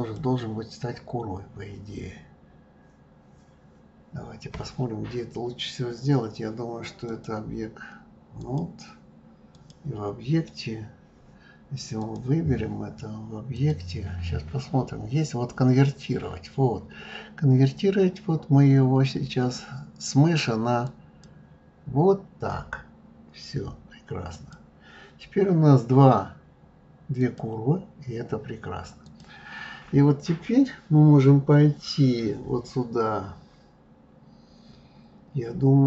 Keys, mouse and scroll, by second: 0.0 click, 7.0-12.1 drag, 13.5-16.6 drag, 24.3 click, 27.1 click, 29.0 click.